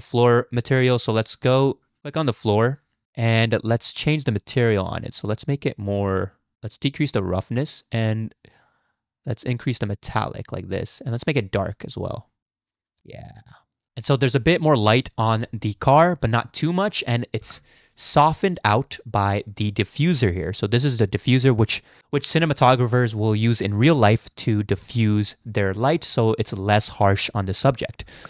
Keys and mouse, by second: 0.6 click, 2.0 click, 5.8-7.2 drag, 8.6-10.9 drag, 11.1 click, 17.9 z, 18.5 shift+drag, 18.8 click, 19.5 shift+click, 20.1 click, 21.0 click, 21.4-21.9 drag, 21.9 middle click.